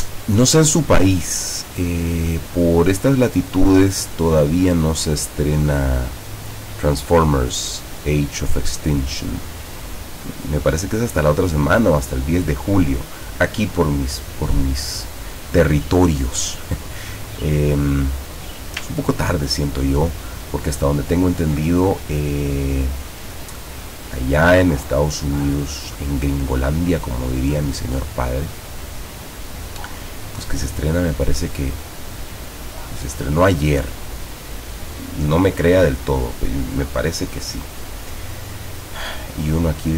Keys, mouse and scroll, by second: 1.3-2.6 drag, 3.3 click, 4.2-6.2 drag, 6.9 click, 8.6 click, 9.8-11.7 drag, 17.3 click, 19.1-21.7 ctrl+drag, 22.9 click, 24.6-27.2 drag, 28.7-32.9 drag, 36.8 click, 38.2-39.5 drag.